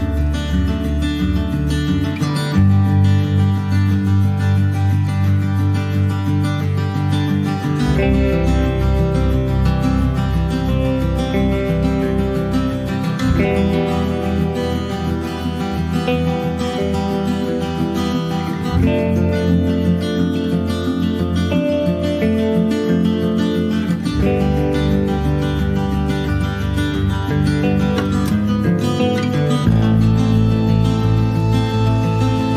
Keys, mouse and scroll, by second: 0.1 scroll down 2, 0.4 shift+middle click, 1.1 click, 4.5 middle click, 5.1 s, 8.3 scroll down 2, 8.6 middle click, 8.9 s, 10.9-11.9 middle drag, 11.9 click, 18.9 click, 19.2 middle click, 19.4 scroll up 1, 19.6 shift+middle click, 20.0 Tab, 20.2 click, 20.4 scroll down 2, 20.6 middle click, 21.0 Tab, 21.1 click, 21.6 middle click, 21.9 scroll up 1, 22.2 Tab, 22.8 scroll down 2, 24.3 ctrl+s, 24.6-26.1 middle drag, 26.1 click, 29.0 scroll up 3, 29.4 shift+middle click, 30.2 ctrl+s, 32.3 click.